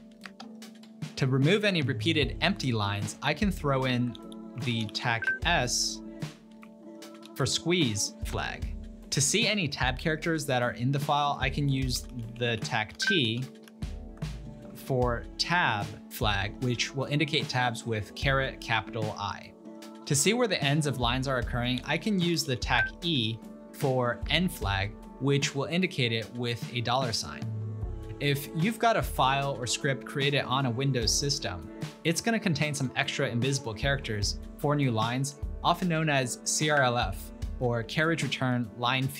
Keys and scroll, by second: 0.3 Return, 4.2 ctrl+p, 4.8 ctrl+Left, 5.0 ctrl+Left, 5.6 Right, 6.9 Left, 7.0 Left, 7.3 s, 8.2 Return, 11.6 ctrl+p, 12.1 ctrl+Left, 12.4 ctrl+Left, 12.5 ctrl+Left, 13.0 Delete, 13.3 Delete, 13.7 t, 15.4 Return, 21.8 ctrl+p, 22.4 ctrl+BackSpace, 24.3 Return.